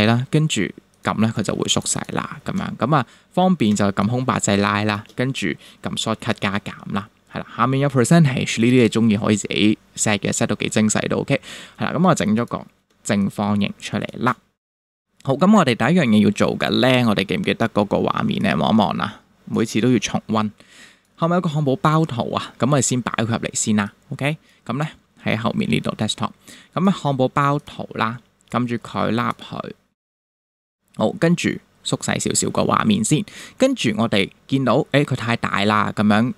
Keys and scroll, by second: 3.7 space, 5.9 super+=, 12.9 space, 31.6 super+-.